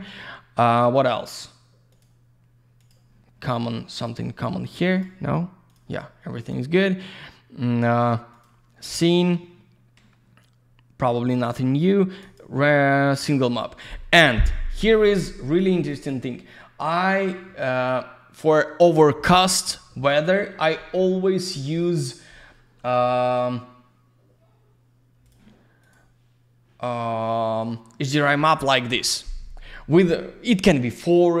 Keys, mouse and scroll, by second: 1.9 click, 2.0 click, 2.8 click, 2.9 click, 4.1 click, 4.1 click, 4.9 click, 5.0 click, 5.7 click, 5.7 click, 6.4 click, 6.5 click, 8.3 click, 8.4 click, 12.2 click, 12.4 click, 15.9 click, 16.1 click, 25.5 click, 25.8 click, 25.9 click.